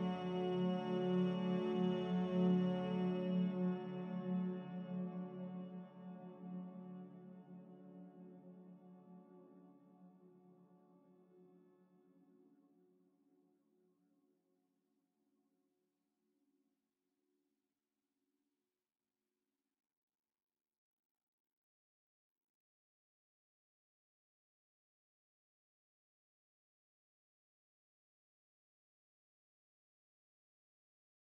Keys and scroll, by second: 0.0 z, 2.8 Escape, 15.2 c, 19.0 z, 22.7 6, 22.9 Return.